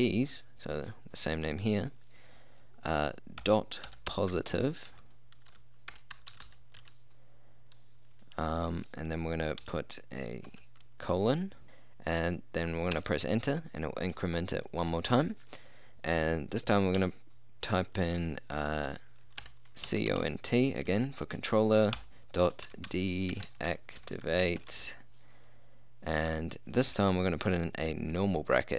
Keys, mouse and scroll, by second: 3.5-6.8 typing, 10.5 shift+;, 13.0 Return, 17.0 d, 19.5-20.3 typing, 22.0-24.8 typing.